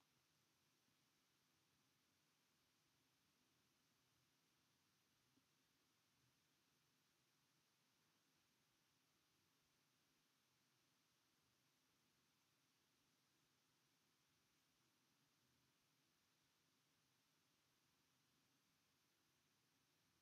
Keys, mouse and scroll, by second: 5.2 s, 10.8 drag, 11.6 shift+click, 12.2 shift+click, 12.9 shift+click, 14.1 s.